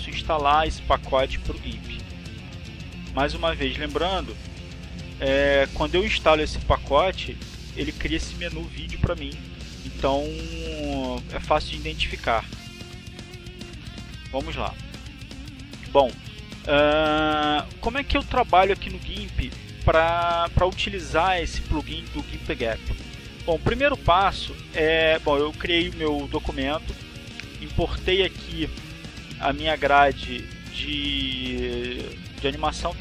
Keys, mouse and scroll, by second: 1.5 click, 3.5 click, 3.9 click, 6.0 click, 7.3 click, 13.7 click, 14.2 click, 30.5 click, 31.2 click.